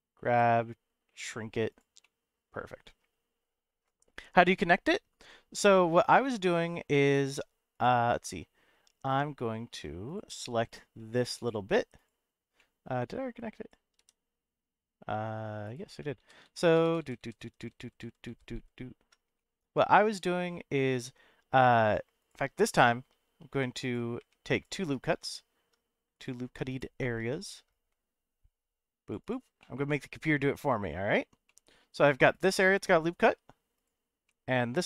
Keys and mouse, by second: 0.2 z, 1.7 click, 2.0-3.0 middle drag, 6.1 middle click, 7.0 click, 7.7 click, 9.0 3, 9.7 2, 10.1 click, 10.7 click, 11.3 click, 11.9 click, 12.6 middle click, 13.4 click, 14.0 g, 15.6 right click, 16.1-19.1 ctrl+z, 19.4 middle click, 19.8 middle click, 22.3 click, 23.5 3, 24.2 2, 24.5 click, 25.2 ctrl+r, 29.2 click, 29.6-30.7 middle drag, 31.5 middle click, 33.2 3, 34.2 middle click.